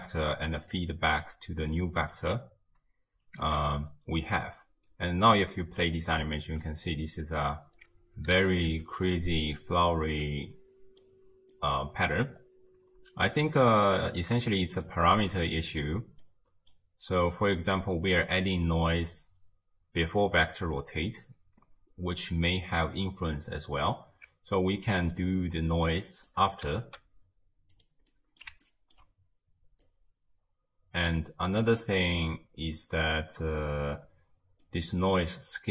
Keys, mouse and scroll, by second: 0.0-2.2 typing, 0.2 click, 0.7 click, 1.8 right click, 3.4 shift+space, 3.9 space, 5.7 space, 6.1-6.6 scroll down 1, 6.6-7.5 middle drag, 7.5 scroll down 2, 8.4 a, 8.7 x, 9.6-12.5 middle drag, 12.5-13.5 scroll down 1, 13.5-14.6 drag, 14.6 shift+right click, 15.2 g, 16.2-17.9 middle drag, 17.9 click, 24.0 alt+click, 26.9 g, 28.1-29.8 middle drag, 29.8 click, 31.8 shift+space, 34.1 space, 34.6-35.7 middle drag.